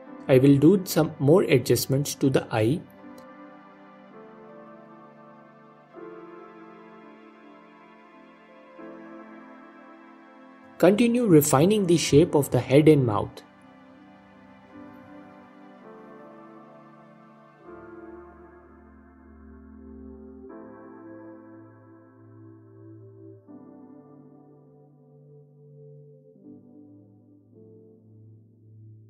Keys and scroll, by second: 1.5 ctrl+Tab, 2.0 s, 4.1 ctrl+Tab, 5.2 Page_Down, 5.4 Page_Down, 5.9 F4, 7.3 F4, 9.7 Page_Up, 9.9 Page_Up, 11.2 f, 11.5 f, 12.2 f, 14.7 f, 15.1 Page_Down, 15.2 Page_Down, 16.8 f, 17.7 f, 19.0 Page_Up, 20.9 Page_Down, 21.0 Page_Down, 21.7 f, 24.1 f, 24.6 Page_Up, 25.8 f, 27.9 Page_Down, 28.0 Page_Down, 28.5 f.